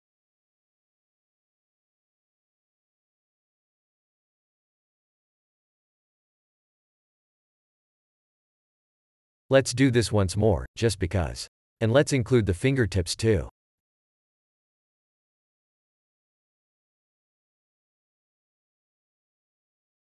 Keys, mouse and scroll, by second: 0.0 F1, 0.2 F1, 0.6 F1, 1.0 F1, 1.3 F1, 3.0 a, 3.6 shift+click, 3.8 shift+click, 4.6 x, 5.8 shift+click, 6.0 shift+click, 6.6 shift+click, 6.7 shift+click, 8.2 shift+click, 8.3 shift+click, 8.6 x, 10.5 shift+click, 11.3 shift+click, 12.5 shift+click, 13.3 w, 15.4 click, 16.1 shift+click, 16.9 shift+click, 18.2 shift+click, 19.6 space.